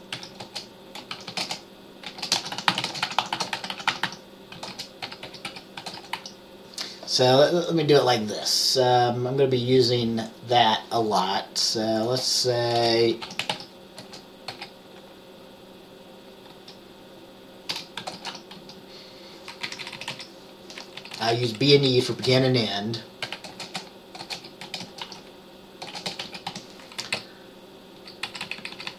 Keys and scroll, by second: 0.0-6.8 typing, 12.9 Return, 13.1-14.6 typing, 16.4-19.2 typing, 19.8 Left, 19.9 Left, 20.1 Left, 20.2 Left, 21.1 Right, 21.3 Right, 21.4 Right, 21.8 Right, 22.0-28.9 typing, 27.1 Down, 27.3 Right.